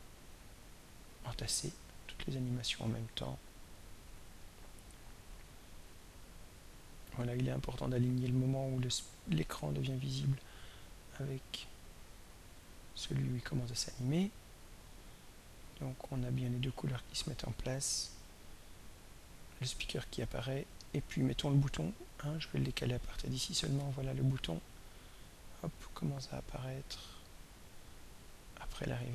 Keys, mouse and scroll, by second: 2.6-4.4 drag, 5.4-7.5 drag, 8.2-10.6 drag, 11.7 click, 13.6-22.5 drag, 23.7 click, 26.2-27.5 drag, 28.2-29.1 drag.